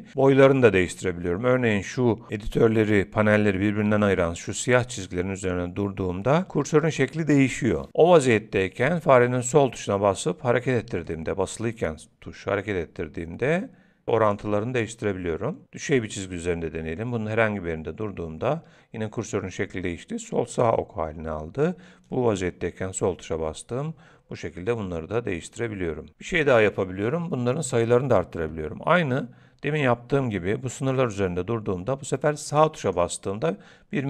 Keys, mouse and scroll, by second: 9.5 click, 11.0 click, 12.2 click, 22.1 click, 32.5 right click.